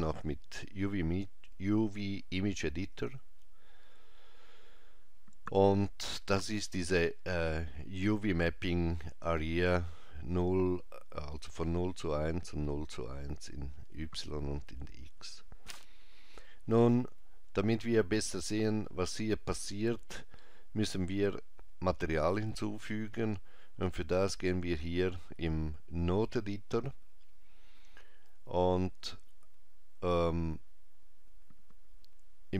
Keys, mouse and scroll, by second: 23.9 click, 28.1-28.5 scroll down 2, 29.0 scroll down 1, 31.2 scroll up 2.